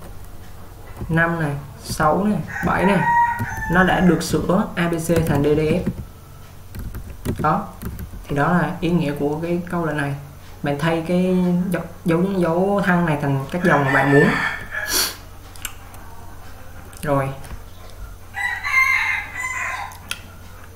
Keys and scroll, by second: 1.1-5.9 typing.